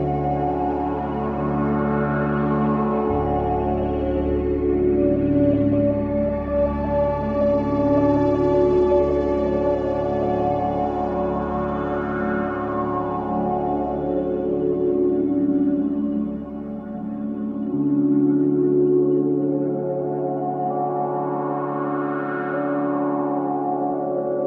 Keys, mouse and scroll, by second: 1.2-1.7 scroll down 1, 3.5 scroll up 1, 5.4 scroll down 1, 10.4 click, 15.4 click, 21.4 click.